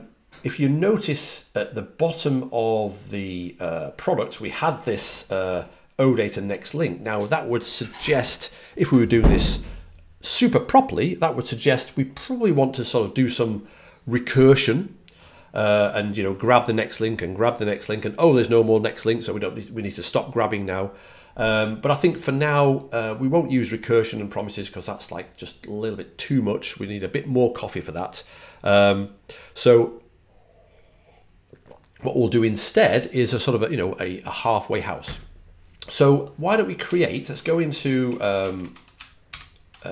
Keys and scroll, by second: 36.8 super+Tab, 37.3 super+Tab, 37.6 super+Tab, 38.3 shift+super+Tab, 38.5 shift+super+Tab.